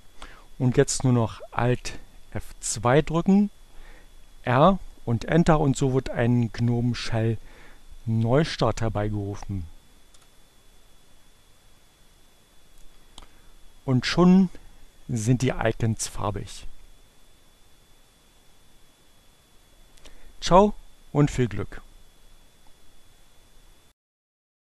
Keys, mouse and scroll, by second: 0.6 alt+F2, 2.4 r, 9.4 Return.